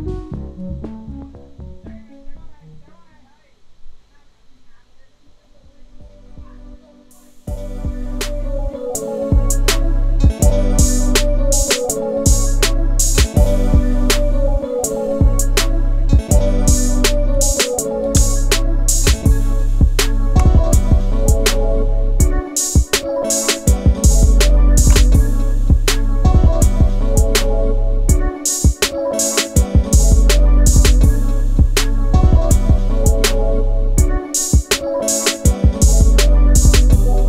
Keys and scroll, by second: 17.9 ctrl+t, 19.2 space, 23.7 space.